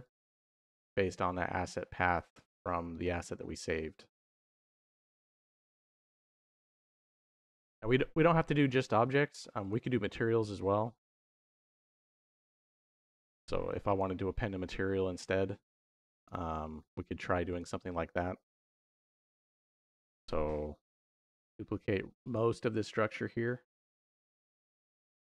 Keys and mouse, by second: 8.1 middle click, 9.5 click, 11.1 click, 11.9 click, 13.2 click, 13.7-15.9 drag, 16.0 click, 16.7 middle click, 17.3 click, 21.0 shift+click, 22.1 shift+click, 23.7 shift+click, 25.0 shift+d.